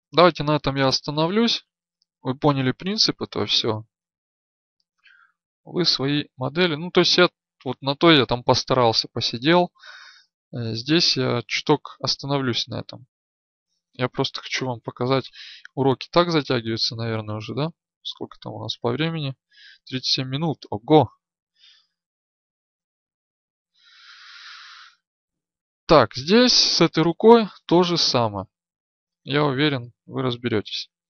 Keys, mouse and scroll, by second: 13.1 ctrl+z.